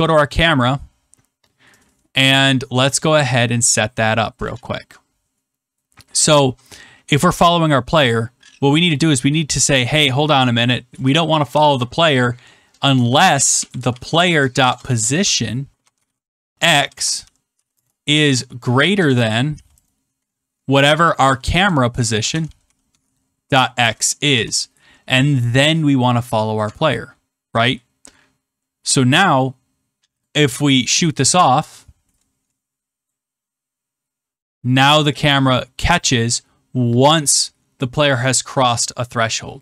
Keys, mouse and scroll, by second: 3.2 click, 4.4 click, 6.4 scroll, 7.6 scroll, 8.9 click, 10.8 Return, 11.2-12.0 typing, 13.1-19.5 typing, 21.2-24.7 typing, 26.5 click, 26.6 Tab, 30.2 click, 33.0 click.